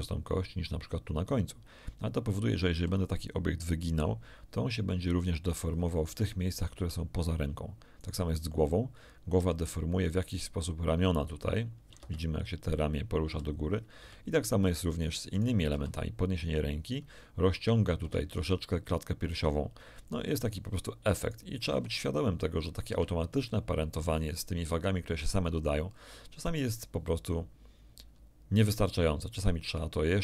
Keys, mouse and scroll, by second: 2.7 r, 6.0 Escape, 8.0 right click, 9.3 r, 12.0 Escape, 13.2 r, 14.0 Escape, 15.3 click, 15.7 r, 18.0 Escape, 20.4 click, 21.2 click, 21.6 r, 22.8 Escape, 24.4 scroll down 2, 24.7 shift+middle click.